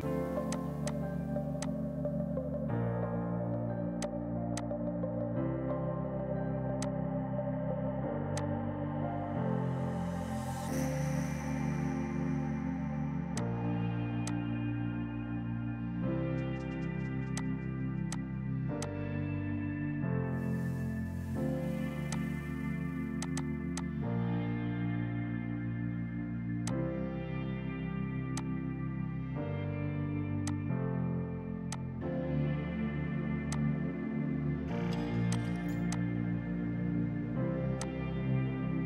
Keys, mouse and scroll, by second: 4.1 click, 4.7 click, 5.9 r, 6.7 Escape, 6.9 click, 8.3 F2, 8.5 click, 8.6 right click, 9.7 End, 10.6 Page_Down, 11.4 Up, 11.8 Down, 12.9 click, 16.0 ctrl+space, 17.5 ctrl+click, 18.2 click, 18.6 space, 18.9 click, 19.8 Up, 21.8 space, 22.2 click, 26.7 click, 28.2 space, 28.4 click, 29.8 F3, 30.4 F2, 30.5 click, 31.7 alt+click, 33.6 click, 35.9 F2.